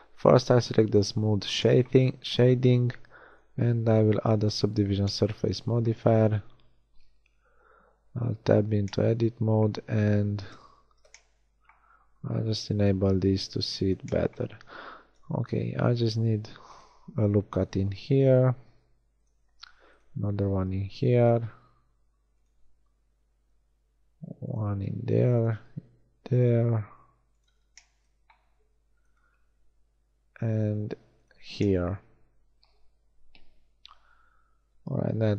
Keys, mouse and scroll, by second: 0.7-1.7 right drag, 6.4 Tab, 7.9 KP_1, 10.1 z, 10.8 z, 15.0 ctrl+r, 19.5 ctrl+r, 21.5 ctrl+r, 24.8 ctrl+r, 28.5 ctrl+r, 35.2 middle click.